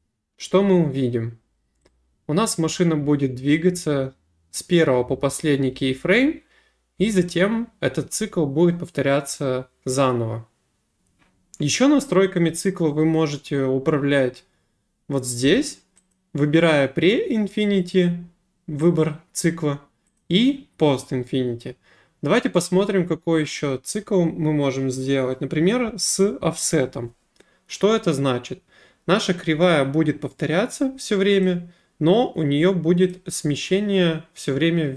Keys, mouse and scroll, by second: 11.0 click, 16.1 click, 20.1 click, 26.7 click, 33.1 click.